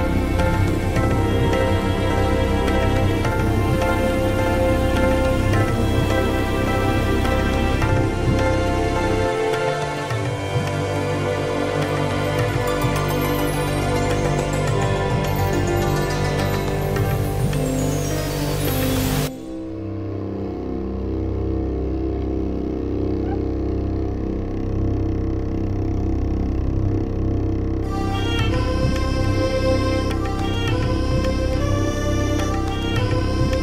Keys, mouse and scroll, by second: 0.0-3.2 typing, 0.0 alt+shift+h, 5.7 click, 7.4-8.8 scroll down 5, 9.3-11.1 drag, 11.6-12.1 scroll down 6, 12.7 click, 12.9 click, 13.8 click, 14.7 scroll down 1, 15.2-16.2 drag, 17.4 click, 18.3 click, 18.6-19.7 typing, 22.9 click, 24.5 scroll down 2, 25.4 click, 29.0-31.7 scroll up 16, 31.9 scroll up 2, 32.7 scroll down 2, 33.0 scroll up 2.